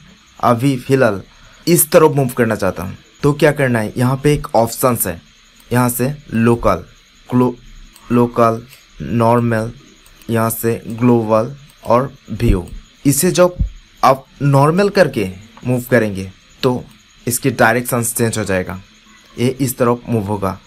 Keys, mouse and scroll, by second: 5.5-11.9 drag, 16.0 middle click.